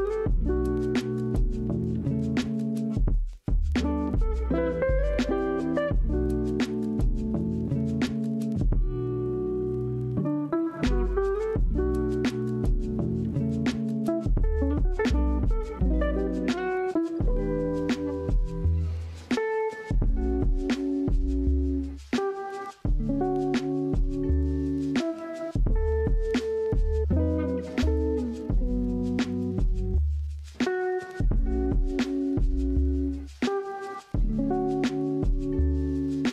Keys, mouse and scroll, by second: 2.0-2.6 scroll down 2, 2.6 shift+middle click, 3.0-3.8 scroll up 1, 3.8-4.4 scroll up 1, 4.4-4.8 scroll down 2, 4.8-7.4 middle drag, 7.4-9.4 drag, 9.9-17.9 middle drag, 17.9 click, 22.8 shift+a, 27.0 g, 28.1 z, 28.1 z, 28.2 z, 29.3 KP_1, 30.7 shift+middle drag, 31.0-31.4 scroll up 1, 31.4-34.8 typing.